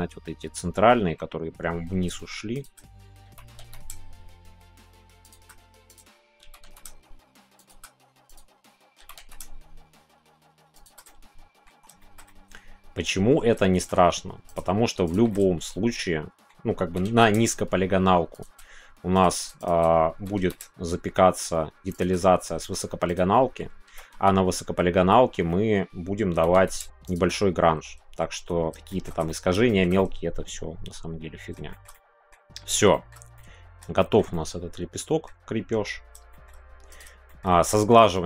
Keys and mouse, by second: 2.5 shift+click, 3.9 shift+y, 5.2 click, 6.8 shift+y, 7.5-9.4 shift+drag, 9.4 shift+y, 10.7 click, 11.0 middle click, 11.7 Tab, 11.9 shift+middle click, 12.2-13.5 middle drag, 13.7 shift+middle click, 13.9 Tab, 15.2-16.4 middle drag, 17.3 shift+y, 18.3 click, 19.1 click, 19.6 click, 20.6 shift+y, 21.9 click, 22.1 middle click, 23.3 middle click, 25.0 ctrl+z, 25.5 middle click, 26.3 g, 27.0 click, 27.3 middle click, 28.4 Tab, 28.9 middle click, 29.2 middle click, 29.6 middle click, 29.9-31.6 middle drag, 31.7 shift+middle click, 33.0 shift+middle click, 33.3 middle click, 33.6 click, 34.0 shift+middle click, 34.3 middle click, 36.3 shift+middle click, 37.2 shift+middle click, 37.6 middle click, 38.1 shift+middle click.